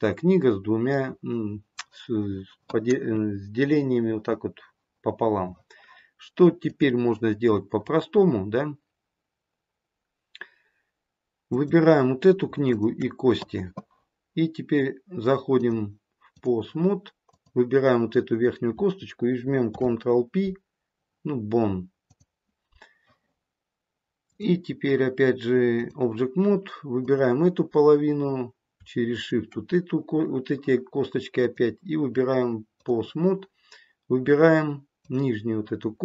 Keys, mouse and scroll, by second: 6.6 click, 11.4 click, 12.6 shift+click, 15.5 click, 17.3 click, 19.6 ctrl+p, 24.2 click, 27.0 click, 29.0 shift+click, 31.3 click, 34.9 click.